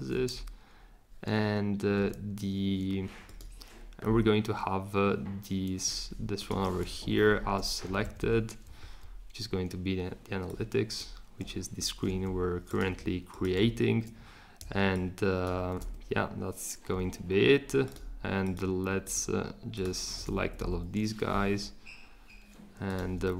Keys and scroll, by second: 7.1 shift+Down, 7.8 Up, 8.0 Up, 8.2 Up, 15.7 shift+super+z, 20.4 Down, 20.6 Down.